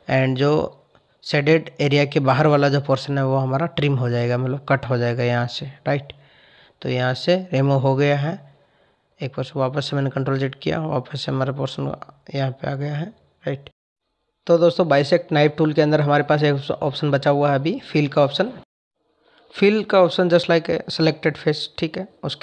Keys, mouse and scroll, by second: 1.1 click, 4.6 click, 7.4 ctrl+z.